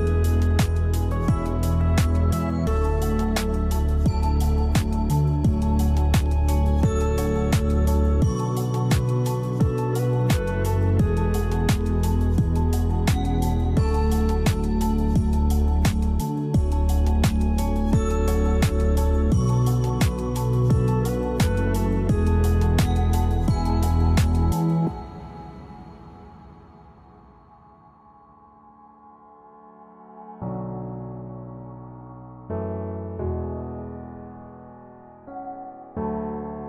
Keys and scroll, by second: 1.6 space, 8.6 space, 10.0 space, 17.2 space, 25.9 space, 27.3 space, 30.1 space, 34.6 space.